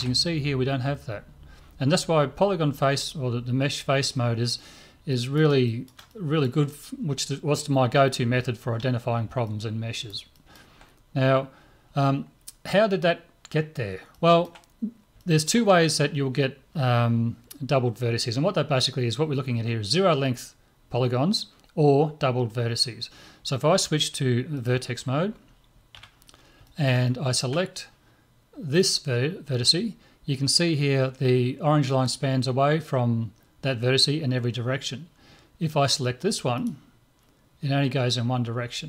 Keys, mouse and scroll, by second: 5.1-7.9 middle drag, 9.4-12.2 middle drag, 12.5-14.1 scroll down 1, 14.7-17.6 middle drag, 24.6-26.7 drag, 25.9 a, 26.7-30.3 middle drag, 28.7 click, 29.4 right click, 36.6 right click.